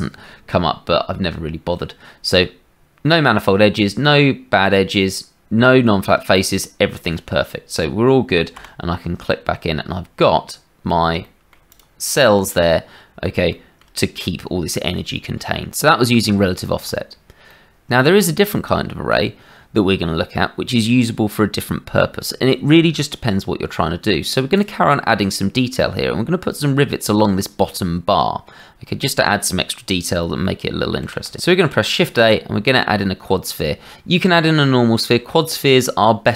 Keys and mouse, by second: 8.5 KP_Divide, 11.2 shift+middle click, 12.5 middle click, 13.5 shift+middle click, 16.4 shift+middle click, 17.4 click, 24.5 click, 31.0 shift+a, 31.7 shift+a.